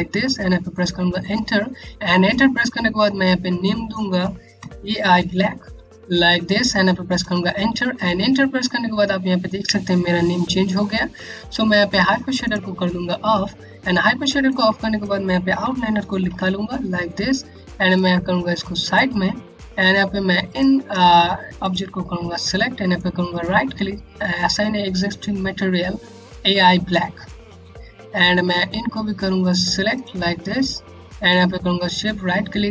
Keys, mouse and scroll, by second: 3.1 click, 4.1 BackSpace, 4.8 a, 5.5 space, 5.9 b, 6.8 Return, 11.9 Return, 12.4 click, 13.4 scroll down 1, 14.0 alt+click, 15.8 o, 17.5 click, 17.7 Home, 21.1 shift+click, 22.5 right click, 29.0 right click, 31.0 right click.